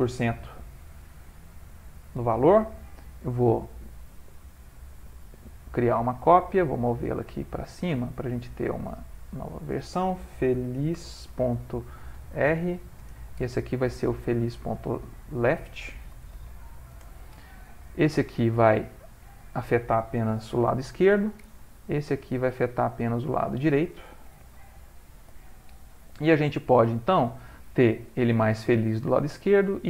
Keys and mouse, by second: 3.9 click, 6.8-9.5 click, 7.2-8.0 typing, 9.4 click, 14.7 click, 16.2 click, 19.2 click, 22.7 click, 23.4 click.